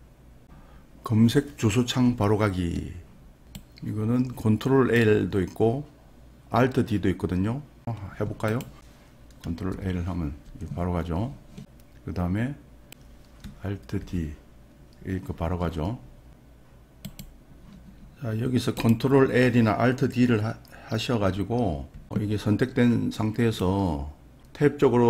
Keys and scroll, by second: 9.8 ctrl+l, 14.1 alt+d, 21.9 alt+d.